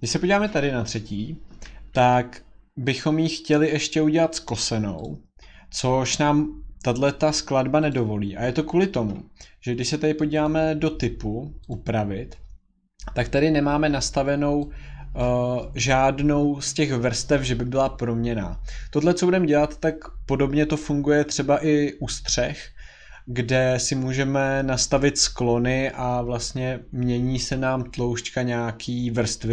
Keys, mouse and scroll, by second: 0.1 click, 2.9 click, 5.0 click, 7.9 click, 10.4 click, 11.7 click, 15.2 click.